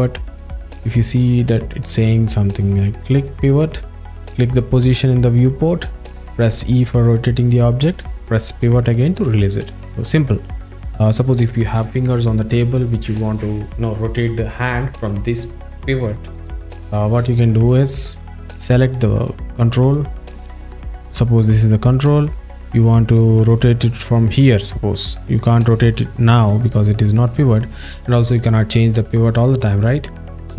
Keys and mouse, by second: 10.1 click, 10.7 click, 18.2 click, 18.7 click, 26.5 z.